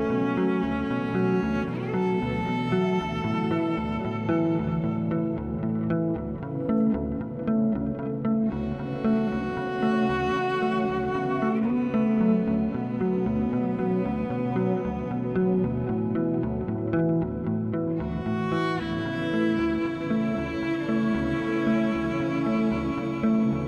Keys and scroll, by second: 0.1 ctrl+z, 0.6 ctrl+z, 4.1 ctrl+-, 4.5 ctrl+-, 5.7 z.